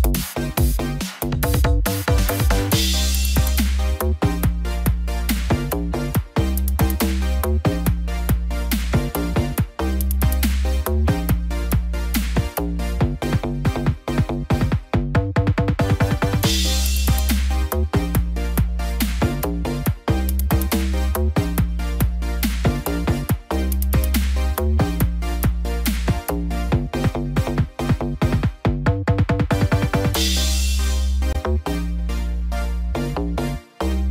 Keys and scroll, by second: 22.5 ctrl+0, 26.1 ctrl+j.